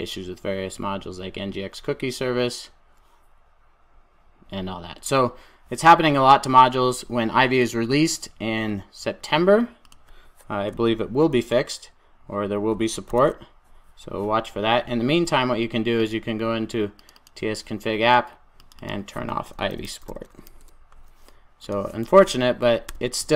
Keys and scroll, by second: 20.4 super+s.